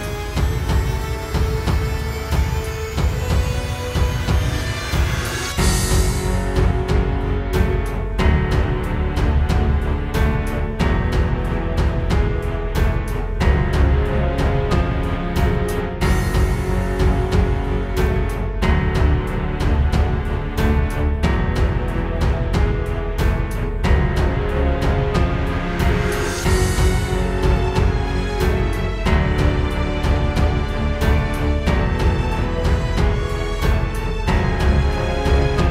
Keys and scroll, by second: 2.9 space, 3.5 alt+super+space, 3.8 alt+super+space, 15.6 super+j, 23.7 super+j, 26.9 space, 29.8 super+", 30.1 space, 33.2 super+".